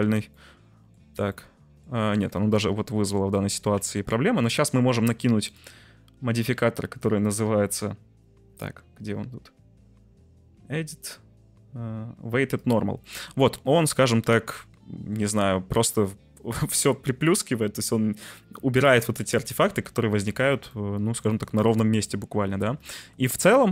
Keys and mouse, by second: 0.0 j, 0.3 middle click, 1.0 Tab, 1.2 middle click, 1.9 Tab, 2.4 ctrl+z, 2.7 ctrl+z, 3.0 ctrl+z, 3.7 Tab, 5.4-12.7 drag, 13.1 middle click, 14.4 middle click, 19.4 Tab, 19.8 middle click, 20.2 Tab, 20.8-21.2 middle drag, 21.4-22.6 middle drag, 22.8 middle drag, 23.5-23.7 middle drag.